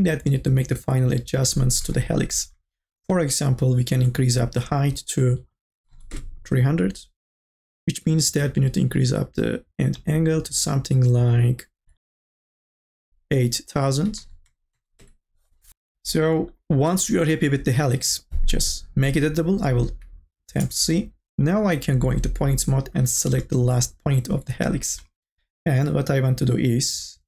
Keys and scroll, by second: 5.5 KP_3, 5.7 KP_0, 6.2 Return, 12.4 KP_0, 12.7 Return, 14.0 KP_8, 14.4 KP_0, 15.0 Return, 20.5 c.